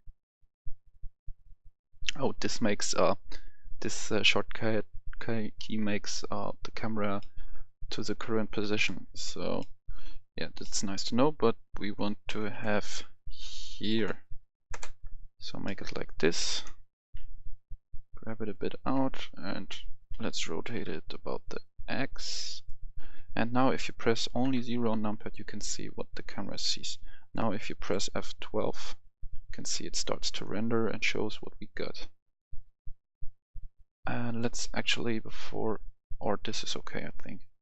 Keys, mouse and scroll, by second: 1.8 click, 1.9 F10, 7.1 middle click, 8.7 KP_0, 9.6-12.2 middle drag, 12.2 KP_1, 12.5 KP_5, 13.0-13.5 scroll up 1, 13.9 KP_5, 14.7 KP_0, 15.6 middle click, 16.7-17.8 scroll down 1, 17.9 click, 19.7 Escape, 20.1 KP_3, 20.7 r, 22.6-23.7 drag, 24.4 KP_0, 27.8 F12, 35.9 click.